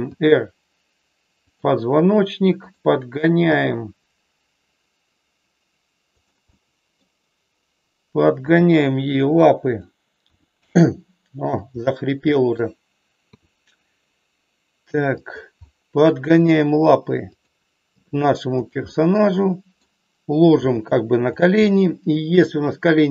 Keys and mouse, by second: 0.1 r, 3.5 g, 6.5 middle click, 8.5 g, 10.2 r, 11.9 middle click, 15.2 click, 15.6 middle click, 18.0 g, 18.5 click, 18.9-19.9 middle drag, 20.6 g, 21.6 middle click.